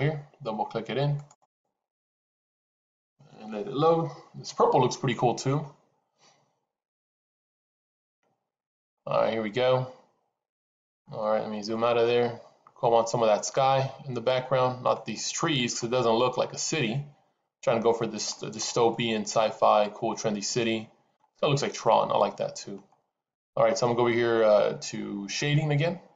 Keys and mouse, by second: 8.8-11.0 middle drag, 11.6-14.8 middle drag, 15.7-18.4 middle drag, 18.8-21.1 middle drag, 21.7-22.7 middle drag.